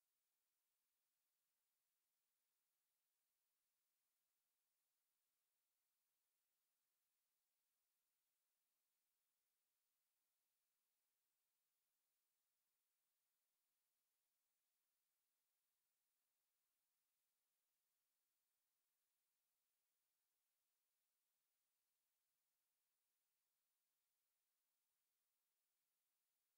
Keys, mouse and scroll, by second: 0.0-1.8 typing, 0.2 click, 0.8 middle click, 0.9 scroll up 1, 1.0 right click, 1.7 shift+middle click, 1.7 right click, 1.8 right click, 2.1 click, 2.8 right click, 2.9 click, 3.2 right click, 3.3 click, 3.6 g, 3.8 right click, 4.2 click, 4.6 scroll down 1, 4.8 shift+click, 5.2-10.0 typing, 5.3 middle click, 5.5 click, 5.8 click, 5.9 middle click, 6.6 middle click, 6.8 right click, 6.9 Tab, 6.9 right click, 7.3 click, 7.6 right click, 7.6 middle click, 7.9 right click, 7.9 middle click, 8.4 click, 8.8 middle click, 8.8 click, 9.1 click, 9.3 shift+middle click, 9.3 scroll down 1, 9.4 middle click, 9.8 click, 9.8 middle click, 10.2 click, 10.4 Tab, 10.6 click, 10.8 right click, 11.2 click, 11.7 middle click, 12.1 click, 13.0 Tab, 13.2 right click, 13.6 alt+s, 13.9 click, 14.0 alt+s, 14.2 scroll down 1, 14.2 middle click, 14.4 right click, 14.6 click, 14.6 middle click, 14.7 right click, 15.0 ctrl+t, 15.0 middle click, 15.2 click, 15.2 middle click, 15.4 ctrl+t, 15.6 click, 15.8 scroll up 1, 15.9 right click, 16.1 alt+s, 16.2 click, 16.5 alt+s, 16.5 right click, 16.5 click, 16.6 middle click, 16.7 g, 16.8 click, 17.0 g, 17.2 click, 17.2 middle click, 17.4 Tab, 17.6 middle click, 17.6 scroll up 1, 17.9 shift+middle click, 18.0 shift+middle click, 18.2 middle click, 18.2 shift+z, 19.0 scroll down 1, 19.2 scroll up 1, 19.4 z, 19.6 middle click, 20.0 click, 20.2 shift+middle click, 20.4 shift+d, 20.6 x, 20.7 click, 20.7 middle click, 20.8 scroll up 1, 21.1 Tab, 21.1 right click, 21.2 middle click, 21.2 right click, 21.3 shift+middle click, 21.4 scroll up 1, 21.6 right click, 21.7 g, 21.8 click, 22.0 scroll up 1, 22.1 click, 22.3 click, 22.3 g, 22.4 middle click, 22.6 click, 22.6 g, 22.8 shift+middle click, 23.0 scroll up 1, 23.0 g, 23.4 click, 23.5 middle click, 23.5 scroll down 1, 23.7 Tab, 23.8 right click, 24.0 ctrl+t, 24.1 click, 24.2 scroll down 1, 24.2 middle click, 24.4 scroll up 1, 24.5 a, 24.6 click, 24.6 right click, 24.8 r, 24.9 g, 25.0 click, 25.2 right click, 25.4 ctrl+t, 25.7 click, 25.8 middle click, 26.0 ctrl+z, 26.1 right click, 26.4 ctrl+t.